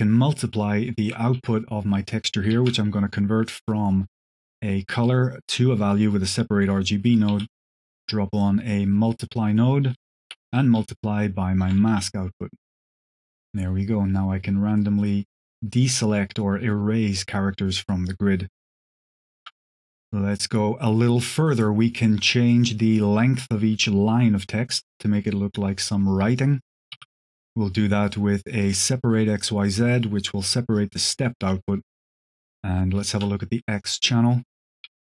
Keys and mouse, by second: 2.7 shift+a, 6.9 click, 7.2 q, 8.6-9.3 drag, 9.9 click, 10.9 alt+click, 12.3 middle click, 13.7-19.3 shift+drag, 19.8 middle click, 20.3 click, 20.3 middle click, 21.1 click, 21.1 middle click, 21.4 click, 26.5 click, 26.8 x, 26.8 shift+a, 27.6 q, 30.7-31.9 drag, 32.1-32.5 drag, 33.6 click, 34.7 q.